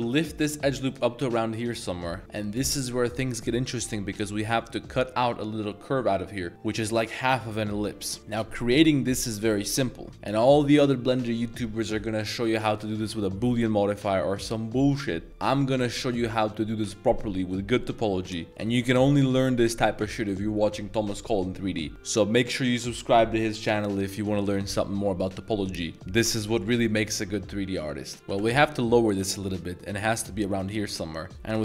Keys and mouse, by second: 10.1 middle click, 28.1 z, 28.3 g, 28.6 z, 30.7 click.